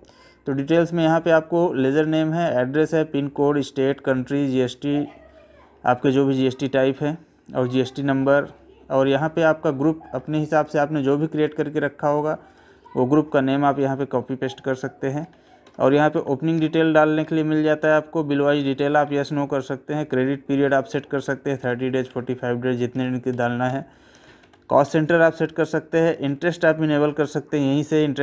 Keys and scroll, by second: 2.2 Right, 5.3 Left, 6.7 Right, 9.0 Down, 10.6 Up, 11.1 Down, 12.1 Up, 13.3 Down, 14.2 Right, 15.2 Left, 15.6 Up, 16.1 Left, 16.6 Up, 16.8 Right, 18.5 Left, 19.1 Right, 20.6 Left, 21.6 Down, 22.1 Right, 22.9 Up, 23.3 Left, 24.1 Up, 24.4 Left, 24.9 Right, 26.3 Right, 28.1 Left.